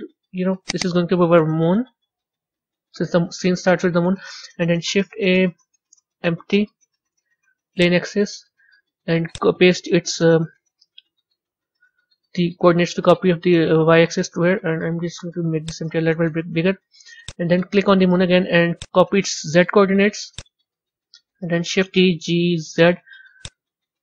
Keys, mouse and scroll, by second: 0.6 click, 0.7-2.1 drag, 2.1 o, 4.8 shift+a, 9.2-12.2 drag, 14.6 s, 17.1 click, 18.6-20.3 drag, 21.9 shift+d.